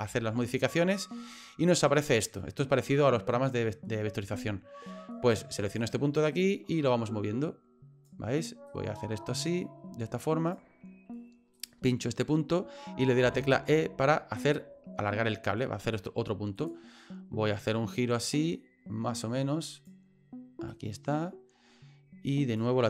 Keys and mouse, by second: 5.8 right click, 6.3-8.1 right drag, 8.7-10.5 right drag, 11.5 right click, 13.2 e, 17.7-19.9 right drag, 20.7-22.6 right drag.